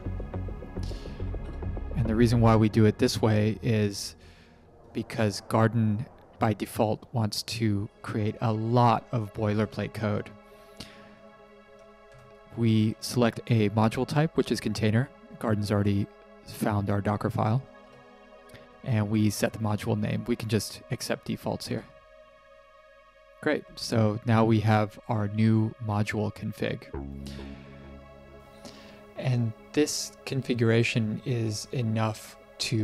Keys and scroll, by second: 0.0-1.4 typing, 1.4 Return, 17.7 Return, 21.5 Return.